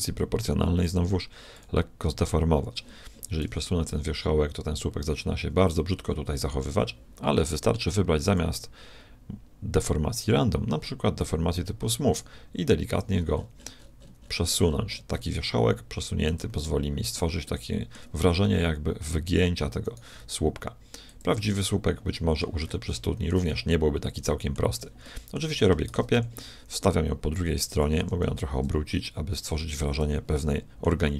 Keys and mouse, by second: 0.8-2.6 drag, 3.4 g, 8.2-10.0 drag, 12.1 g, 16.6-18.4 middle drag, 18.4 g, 19.9 click, 20.2 g, 22.1-23.2 middle drag, 24.3 middle click, 24.6 middle click, 24.8 Tab, 25.9 shift+d, 28.0 r, 30.4-31.1 middle drag.